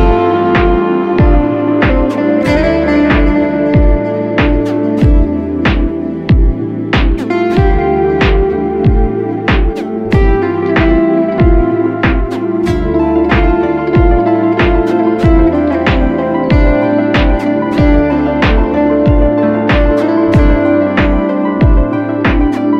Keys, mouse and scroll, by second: 20.4-22.2 typing.